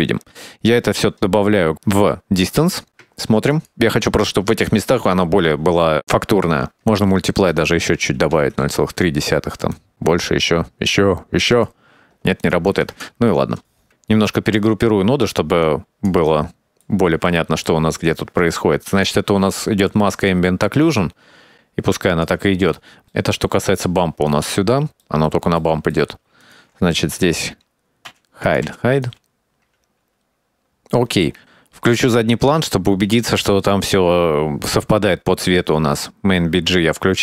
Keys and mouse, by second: 0.6 middle click, 1.3-2.8 drag, 3.3 ctrl+shift+click, 6.6 shift+middle click, 8.5 middle click, 8.8-11.8 drag, 12.6 click, 14.0 middle click, 14.7 click, 15.2-15.6 drag, 16.7-17.2 drag, 17.5 middle click, 17.9 middle click, 18.2 click, 19.1 click, 19.4 middle click, 19.8 middle click, 20.4 click, 20.8 click, 21.3 click, 22.5-24.4 drag, 24.5 middle click, 25.3 click, 26.3 middle click, 26.6 middle click, 27.2 click, 28.4 h, 28.6 click, 28.8 h, 28.8-29.2 drag, 29.2 click, 29.5 click, 29.8 middle click, 30.0 click, 30.3 click, 30.7 shift+middle click, 31.8-32.9 drag.